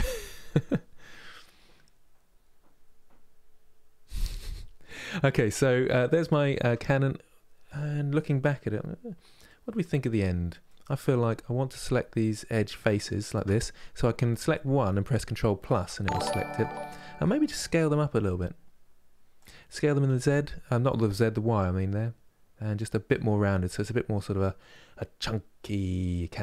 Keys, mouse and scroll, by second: 6.9-7.3 scroll up 2, 7.3-8.5 middle drag, 8.5 scroll down 2, 9.1-11.5 middle drag, 11.5 3, 12.6-14.2 alt+drag, 14.2-15.3 middle drag, 15.3 KP_Add, 16.3-17.6 middle drag, 17.6 s, 19.8 s, 22.8-25.8 middle drag.